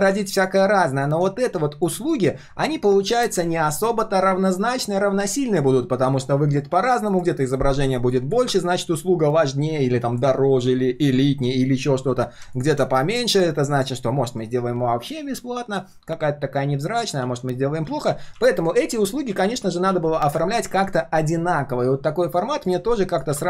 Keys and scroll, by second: 17.2 ctrl+z, 17.8 ctrl+z, 18.0 ctrl+z, 18.3 ctrl+z.